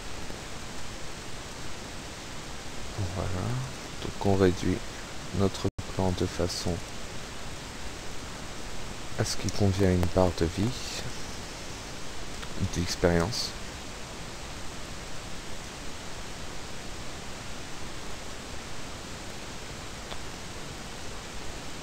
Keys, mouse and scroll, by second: 0.0-1.9 drag, 0.3-1.4 typing, 2.1-2.5 scroll down 1, 3.7 right click, 6.1 click, 6.6 click, 7.6-11.3 drag, 8.5 KP_0, 8.7 KP_5, 12.6 click, 13.7-15.9 drag, 15.0 KP_Decimal, 15.2 KP_5, 16.7 Tab, 17.3 KP_1, 21.0 click, 21.4 1.